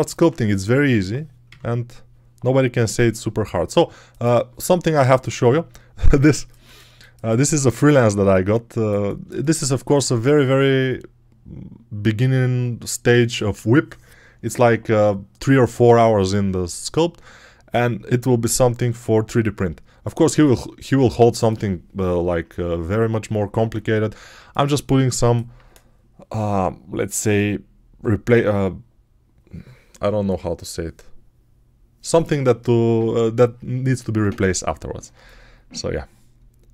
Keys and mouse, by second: 1.3 n, 8.8-9.9 ctrl+alt+right drag, 16.4-20.0 alt+right drag, 24.2-25.4 alt+right drag, 35.0 alt+right click, 35.2-36.7 alt+right drag.